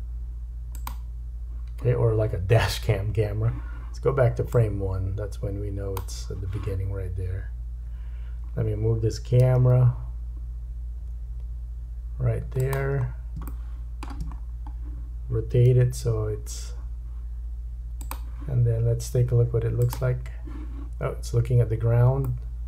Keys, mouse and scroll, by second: 0.9 click, 4.6 click, 7.9 KP_7, 9.4 g, 13.1 scroll up 2, 13.5 shift+middle click, 14.4-15.7 scroll up 2, 15.7 r, 19.8 click, 22.2 middle click.